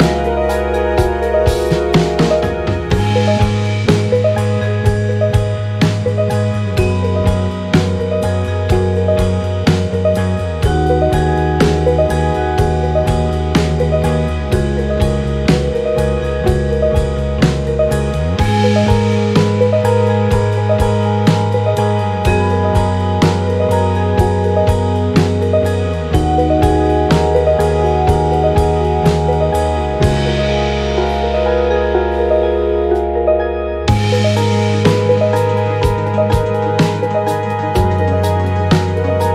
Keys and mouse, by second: 6.0 click, 7.2-9.6 drag, 10.7 click, 12.1-14.4 drag, 18.0-23.0 drag, 24.7 click, 30.4 click, 33.4-38.6 drag.